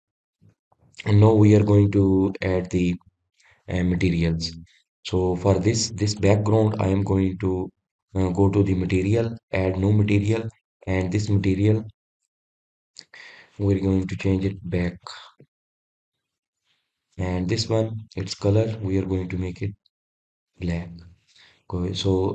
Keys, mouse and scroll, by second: 0.6-0.9 scroll up 2, 0.9-1.4 scroll down 2, 1.4-4.5 middle drag, 6.3-7.2 scroll up 1, 7.2 click, 7.9 drag, 8.9 click, 10.6 drag, 11.4-15.5 drag, 19.7 click.